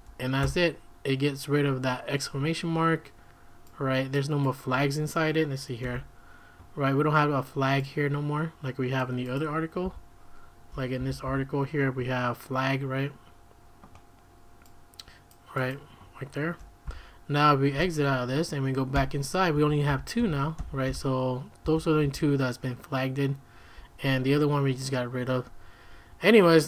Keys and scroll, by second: 0.4 Return, 9.8 q, 11.0 j, 11.3 l, 16.8 q, 17.7 q, 18.9-22.0 typing.